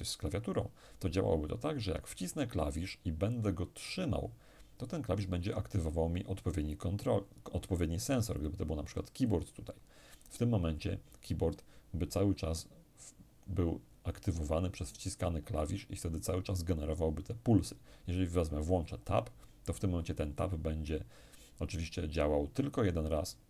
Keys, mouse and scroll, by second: 8.0 click, 18.0 click.